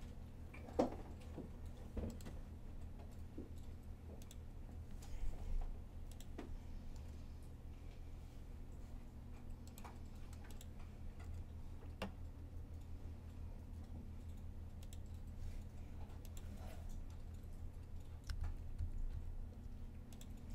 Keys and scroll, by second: 6.8 r, 11.1 r, 18.2 super+z, 18.6 super+z, 18.9 super+z.